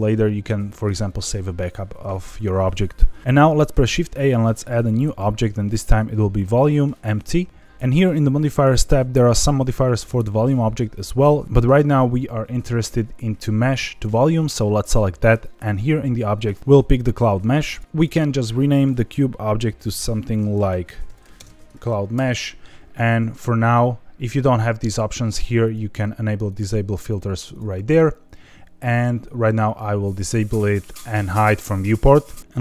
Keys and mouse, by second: 3.7 shift+a, 10.0-14.0 drag, 16.4 click, 18.1-22.7 drag, 25.0-28.1 drag, 29.6 click, 31.4 click.